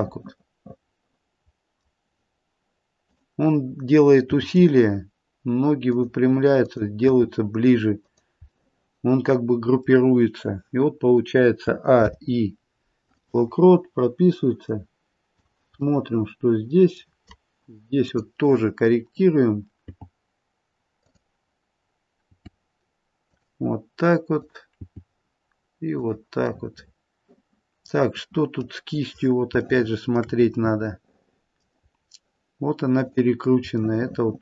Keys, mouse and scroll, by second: 0.0 middle click, 3.0 click, 4.3 g, 6.6 click, 7.1 g, 8.5 middle click, 9.5 middle click, 11.6 a, 12.0 i, 14.6 click, 16.0 middle click, 18.0 click, 19.0 click, 19.8 g, 21.0 click, 22.3 g, 24.3 click, 25.0 g, 26.5 middle click, 27.0 middle click, 29.1-29.7 scroll up 1, 29.7 shift+middle click, 29.7-30.0 scroll up 1, 30.5 middle click, 31.7-32.7 scroll up 2, 33.0 click, 33.7 shift+middle click.